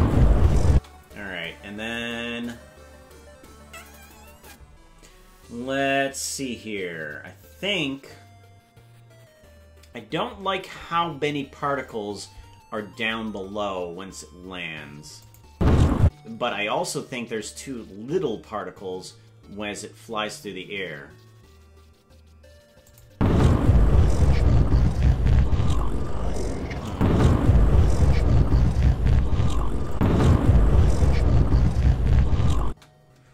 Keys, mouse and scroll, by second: 0.7 space, 15.2 click, 15.5 space, 16.0 space, 22.9 click, 23.1 space, 26.9 click, 30.0 click, 32.6 space.